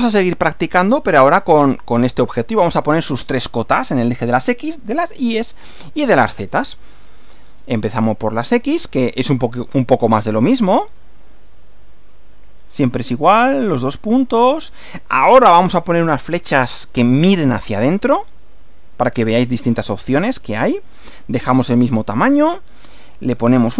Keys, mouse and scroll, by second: 0.9-1.6 shift+middle drag, 6.9-7.7 shift+middle drag, 7.9 shift+scroll up 1, 8.5-9.1 shift+middle drag, 9.9 click, 11.4 click, 12.8 click, 14.4 click, 18.0-18.7 drag, 19.3 click, 19.9 click, 20.3 click, 21.2-22.4 typing, 22.9 click.